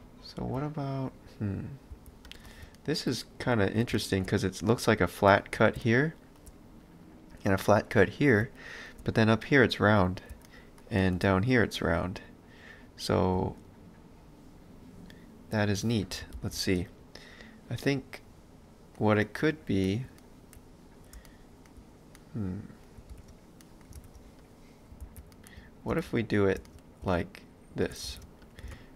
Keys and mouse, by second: 0.4 b, 2.7 ctrl+middle click, 16.4 ctrl+z, 16.8 middle click, 23.1 ctrl+space, 23.6 middle click, 24.0 ctrl+space, 24.4 click, 25.0 ctrl+x, 25.3 middle click, 25.9 ctrl+space, 26.2 click, 26.6 space, 28.3 ctrl+space, 28.5 click.